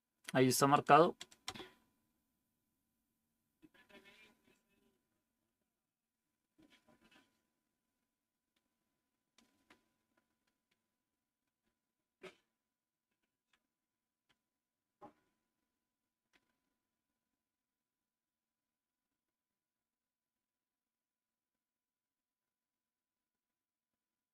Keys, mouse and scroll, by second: 1.4 Return, 11.5-13.3 Down, 14.2-16.2 Up.